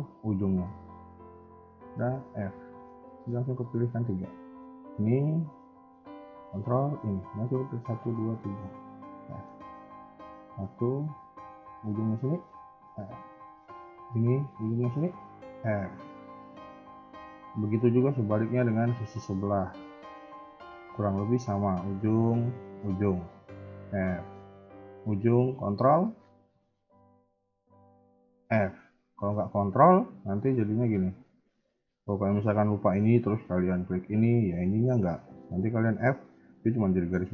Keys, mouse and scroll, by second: 0.1 ctrl+click, 0.6 middle click, 2.2 f, 2.6 a, 2.8 a, 3.0 shift+middle click, 4.2 click, 6.8 ctrl+click, 8.7 f, 9.2 shift+middle click, 9.7 a, 9.8 a, 10.3 click, 12.3 ctrl+click, 12.8 f, 13.4 a, 13.7 click, 15.0 ctrl+click, 15.4 f, 15.8 shift+middle click, 17.1 click, 18.1 ctrl+click, 18.7 f, 19.3 click, 19.7 shift+middle click, 20.4 ctrl+click, 20.9 f, 21.2 click, 22.6 ctrl+click, 23.6 f, 24.1 shift+middle click, 24.7 click, 27.7 ctrl+click, 28.3 f, 28.7 a, 28.8 a, 29.3 shift+middle click, 30.4 ctrl+z, 30.7 ctrl+z, 31.1 ctrl+z, 31.5 a, 31.7 a, 32.2 click, 33.9 shift+click, 35.8 f.